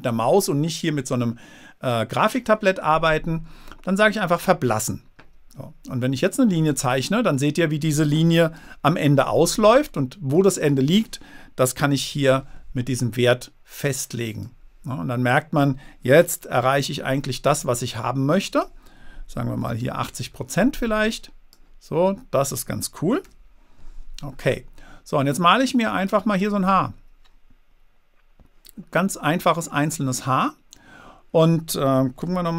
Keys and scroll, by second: 8.9 super+z, 12.2 6, 14.3 0, 16.8 super+z, 20.3 0, 20.4 Return, 23.6 super+z.